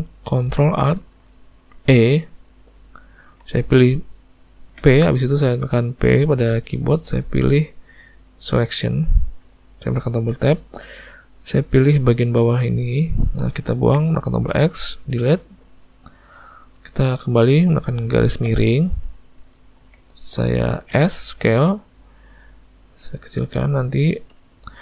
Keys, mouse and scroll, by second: 1.8 ctrl+alt+e, 5.0 p, 10.4 Tab, 11.1 click, 14.0 x, 15.7 click, 18.5 /, 19.6 ctrl+middle click, 21.0 s, 23.8 click.